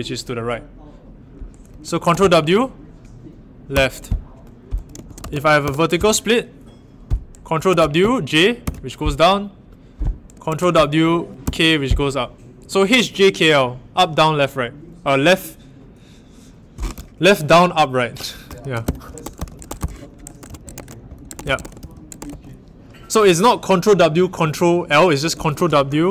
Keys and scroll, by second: 2.1 ctrl+w, 3.7 h, 4.8-5.8 typing, 7.7 ctrl+w, 8.6 i, 10.4 ctrl+w, 11.4 k, 18.7 ctrl+w, 18.8-22.2 typing, 19.2 ctrl+w, 19.6 ctrl+w, 20.3 ctrl+w, 20.7 ctrl+w, 25.4 ctrl+w.